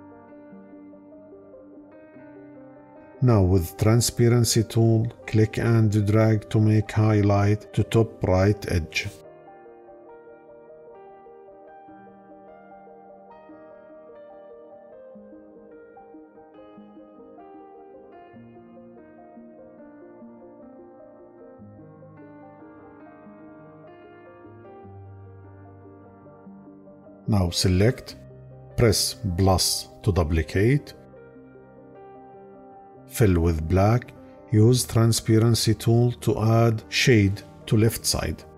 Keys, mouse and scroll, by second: 29.2 +.